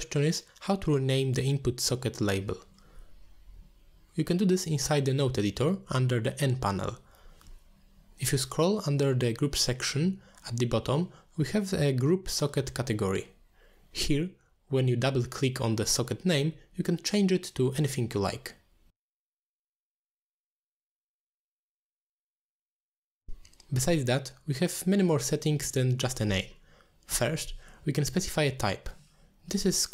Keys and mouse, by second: 1.0 click, 2.8 n, 14.6 click, 14.9-18.2 drag, 18.8-20.1 drag, 21.2-22.4 shift+drag, 24.5 middle click, 25.0 shift+click, 25.4 g, 26.2 click.